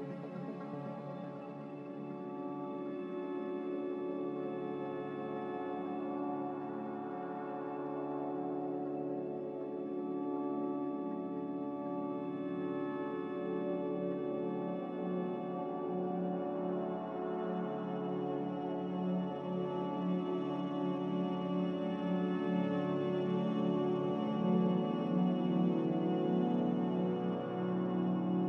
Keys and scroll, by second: 1.6 b, 14.7 F9, 14.7 z, 18.7-20.1 typing.